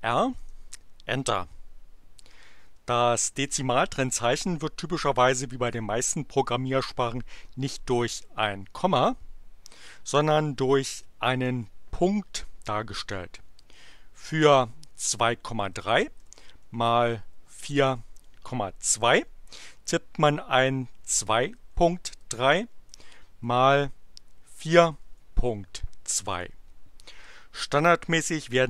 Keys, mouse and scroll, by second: 0.4 Return, 8.3 ,, 10.6 BackSpace, 11.3 ., 13.6-18.3 typing, 18.8 Return, 20.7-22.1 typing, 23.4-25.5 typing, 26.1 Return.